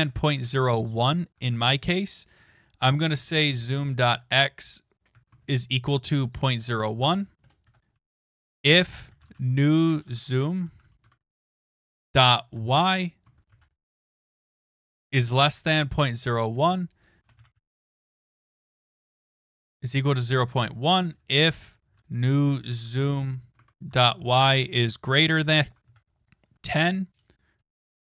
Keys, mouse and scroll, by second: 0.0-0.8 typing, 1.6 Return, 2.8-11.2 typing, 7.4 Return, 13.2-24.4 typing, 23.6 Tab.